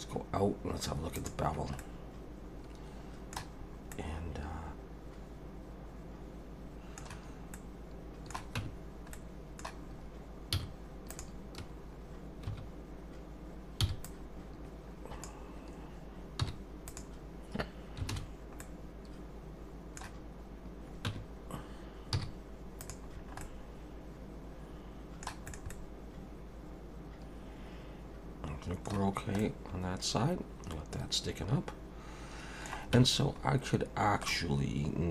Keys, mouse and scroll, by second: 1.2 click, 1.8 middle click, 3.6 scroll up 2, 3.9 middle click, 7.5 middle click, 8.6 Tab, 9.1 middle click, 10.5 z, 12.5 1, 13.8 b, 16.4 m, 18.1 alt+a, 18.6 middle click, 21.1 Tab, 22.1 z, 23.1 scroll down 3, 23.4 middle click, 25.5 middle click, 25.6 scroll up 1, 25.7 middle click, 29.0 scroll down 3, 29.4 middle click, 32.9 Tab, 33.5-34.0 scroll up 1, 34.0 scroll down 1, 34.3 middle click.